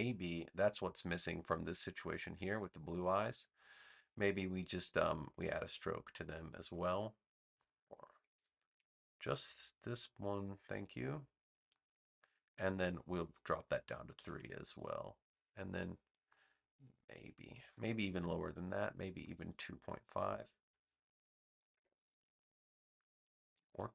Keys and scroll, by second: 8.6 super+z, 14.1 3, 14.3 Return, 21.4 2, 21.7 Return.